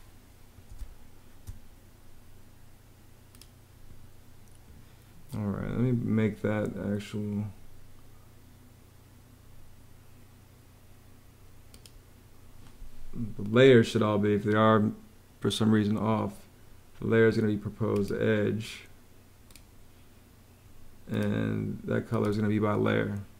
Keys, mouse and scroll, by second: 0.6 space, 23.2 ⟲.